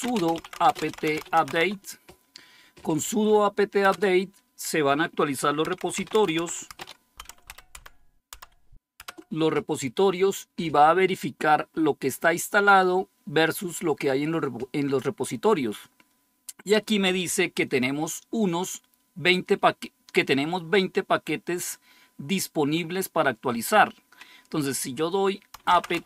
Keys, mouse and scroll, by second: 0.0-1.9 typing, 3.8 Return, 5.3-8.9 typing, 25.2-26.0 typing.